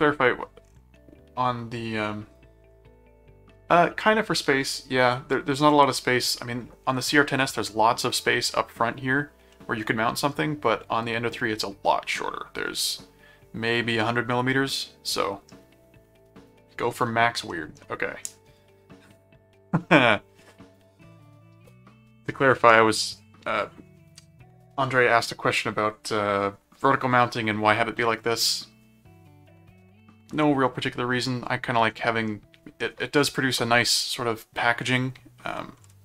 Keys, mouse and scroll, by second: 9.5 middle click, 14.3-15.5 middle drag, 17.5 middle click, 18.4 scroll down 2, 19.2 scroll down 2, 19.9 middle click, 32.0 middle click.